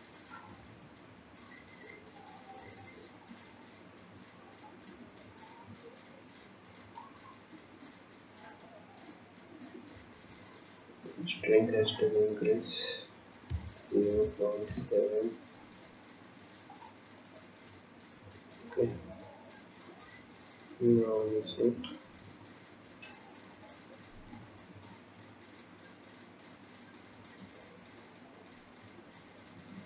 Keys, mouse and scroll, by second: 11.9 click, 17.2 click, 18.8 click.